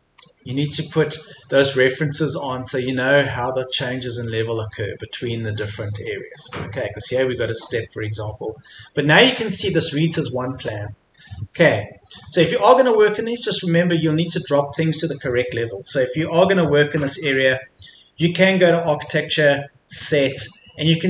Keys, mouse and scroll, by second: 0.2-1.2 scroll down 1, 1.2 middle click, 2.0-2.4 scroll up 1, 2.4 middle click, 3.4-4.3 scroll down 1, 4.3 middle click, 5.2-5.6 scroll down 1, 5.6 middle click, 6.4-6.8 scroll up 1, 7.7-8.2 scroll down 1, 8.2 middle click, 9.4-10.7 scroll down 1, 10.7 middle click, 11.8-12.2 scroll up 1, 12.2 middle click, 13.2-18.4 scroll up 1, 18.4-21.0 drag.